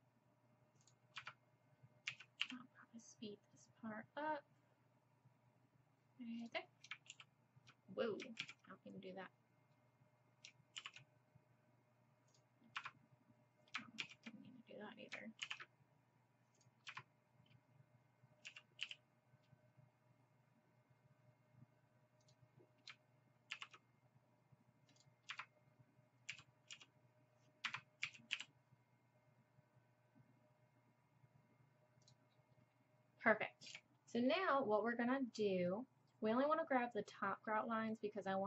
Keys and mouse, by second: 2.1 s, 7.1 ctrl+t, 8.4 ctrl+z, 10.8 ctrl+r, 14.0 ctrl+z, 15.4 ctrl+r, 18.5 s, 23.5 ctrl+r, 26.3 s, 28.0 s, 33.7 a, 37.5-38.4 middle drag.